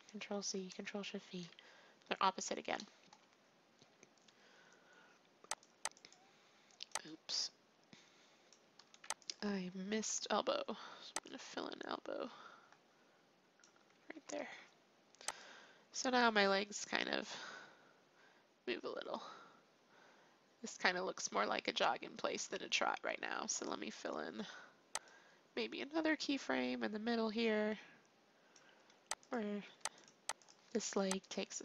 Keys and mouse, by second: 0.3 ctrl+c, 1.2 ctrl+shift+v, 2.7-4.4 drag, 4.5 click, 5.5-10.9 drag, 9.7 alt+r, 11.2-12.9 drag, 12.9 click, 14.1 alt+r, 15.3-17.2 drag, 25.0-26.9 drag, 29.2-31.6 drag, 29.6 r, 30.6 r.